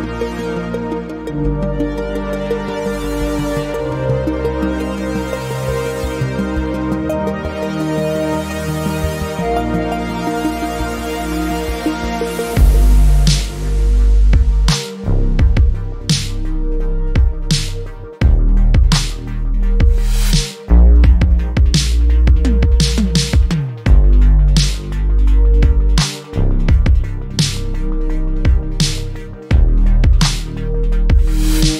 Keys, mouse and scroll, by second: 0.3-0.9 scroll up 1, 0.9 alt+middle click, 3.0 click, 7.0 scroll down 1, 7.3 alt+middle click, 7.6-8.3 alt+scroll up 1, 8.3 click, 11.6 scroll up 1, 11.7-12.1 scroll down 1, 12.6 alt+middle click, 12.9 alt+scroll up 2, 13.6 alt+middle click, 16.4 click, 17.1 alt+middle click, 17.5 click, 17.9 right click, 19.3 click, 29.7 right click, 30.1 click.